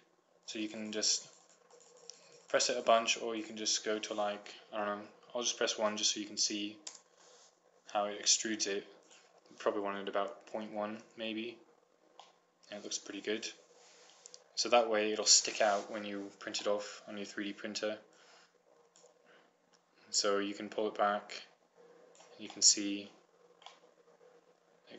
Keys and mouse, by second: 0.7-5.6 drag, 5.6-9.3 middle drag, 9.3-11.1 drag, 11.2-12.5 middle drag, 14.1 typing, 14.7-19.2 middle drag, 19.2-20.2 drag, 20.2 middle click, 20.9-22.4 drag, 22.0 typing, 22.4 middle click, 22.8-24.1 drag, 24.5 click, 24.5 typing.